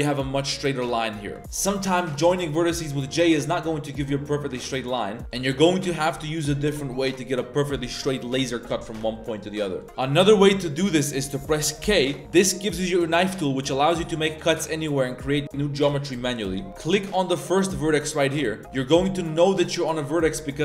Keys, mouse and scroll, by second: 0.8-1.4 middle drag, 3.1 right click, 5.2 ctrl+z, 5.2 middle click, 9.4 click, 9.5 middle click, 10.0-11.3 middle drag, 11.9 k, 16.7 k.